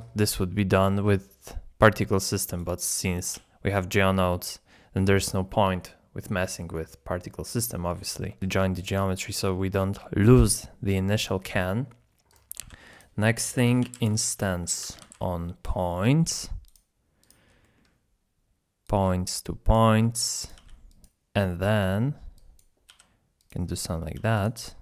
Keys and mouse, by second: 2.5 d, 2.6 click, 5.0 shift+a, 9.0 g, 12.3 click, 12.7 shift+a, 17.7 middle click, 18.8 click, 19.0-19.8 drag, 20.4 click, 20.6 g, 22.3 drag, 22.9 g, 23.8 middle click, 24.1 g.